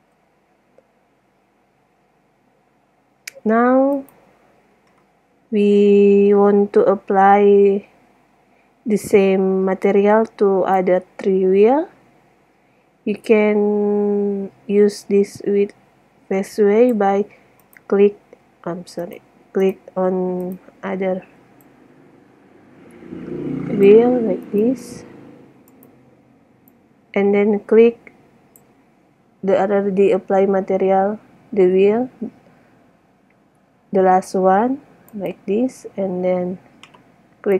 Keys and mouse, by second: 0.0 Escape, 1.3 middle click, 4.1 right click, 10.8-12.0 middle drag, 12.0 click, 12.3-13.4 middle drag, 13.8-14.1 middle drag, 18.0-18.4 right drag, 18.4-19.3 middle drag, 21.8-23.8 middle drag, 24.7-25.2 right drag, 26.7-28.4 middle drag, 35.4 right click.